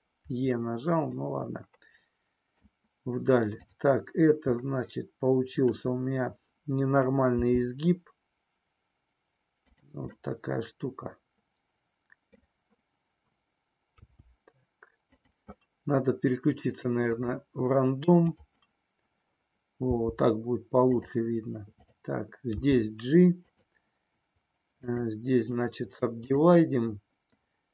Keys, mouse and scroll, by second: 1.2-2.7 middle drag, 4.7-5.9 middle drag, 7.3 g, 10.2-13.9 middle drag, 13.9 g, 15.0 click, 17.0-18.5 drag, 19.9 g, 20.8 click, 21.7 click, 22.5 g, 23.5 click, 25.5-27.7 right drag.